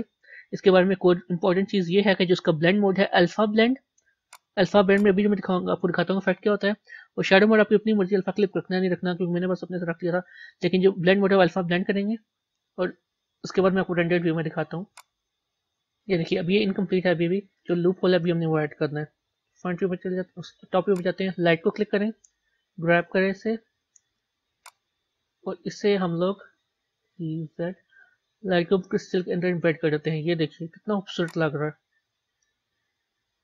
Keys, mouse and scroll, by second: 0.0-15.9 drag, 16.5-19.4 middle drag, 19.4 KP_7, 21.2 click, 22.4 g, 25.2-27.0 middle drag, 27.0 g, 32.1-33.4 middle drag.